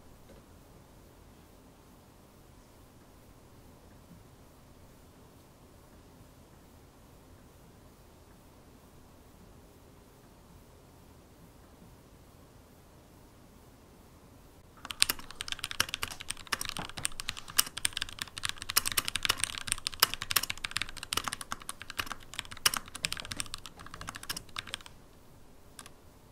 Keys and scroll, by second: 0.0-1.6 typing, 22.8-24.7 typing.